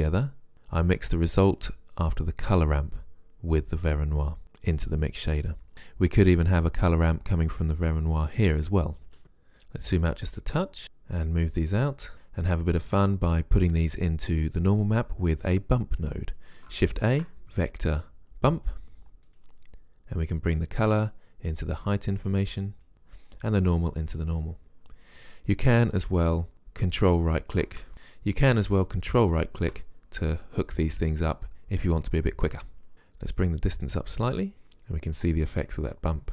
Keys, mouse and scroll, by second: 11.1 click, 17.1 shift+a, 20.6 click, 22.9 click, 27.9 ctrl+z, 34.5 click.